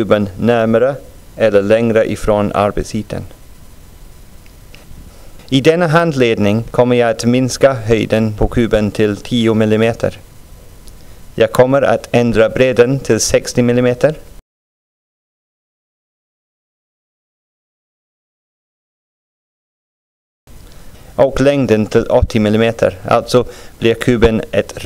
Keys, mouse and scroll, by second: 10.1-12.3 drag, 16.4-20.5 drag, 21.2 scroll down 2, 21.7-24.3 middle drag.